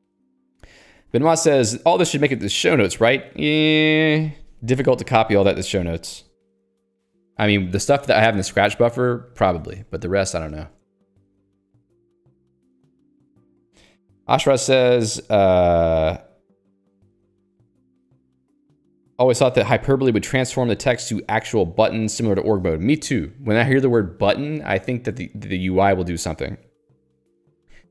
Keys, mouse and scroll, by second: 8.4 ctrl+alt+j, 9.3 ctrl+j, 9.7 Return, 10.7 ctrl+alt+j, 10.9 Return.